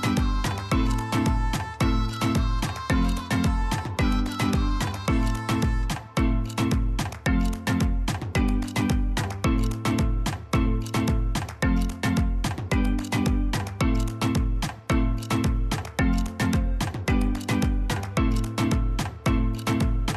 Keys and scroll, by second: 17.1 ctrl+c, 17.4 ctrl+v, 18.7 Delete.